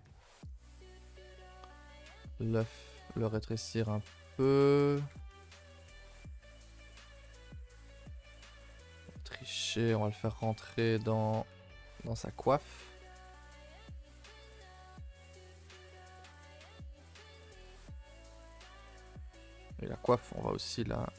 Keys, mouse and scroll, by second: 0.7 middle click, 1.0 s, 1.9 r, 2.6 s, 3.1 g, 4.0-5.1 middle drag, 5.1 r, 5.9 middle click, 6.5 Tab, 6.7 scroll up 1, 6.9 middle click, 7.0 a, 7.1 a, 7.3 1, 7.6 click, 8.0 click, 9.5 click, 9.8 g, 12.3 click, 13.1 click, 13.3 g, 14.4 middle click, 15.4 g, 16.1 middle click, 16.8 click, 17.1 g, 17.8 middle click, 18.6 click, 18.6 g, 19.2 Tab, 19.4 click, 19.6 Tab, 19.7 middle click, 19.9 scroll up 2, 20.3 click, 20.6 g.